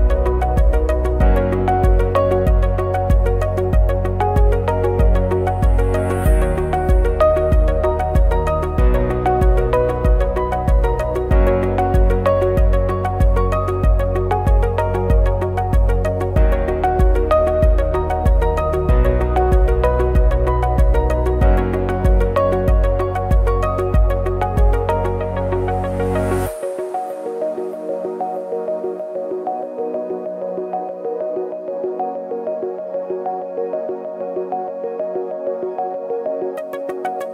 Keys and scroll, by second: 1.3 ctrl+c, 2.7 ctrl+c, 4.1 ctrl+c, 4.2 ctrl+e, 5.2 ctrl+c, 5.3 ctrl+f, 7.2 ctrl+shift+a, 19.2 ctrl+shift+a, 21.8 ctrl+-, 26.9 ctrl+shift+a, 28.9 ctrl+=.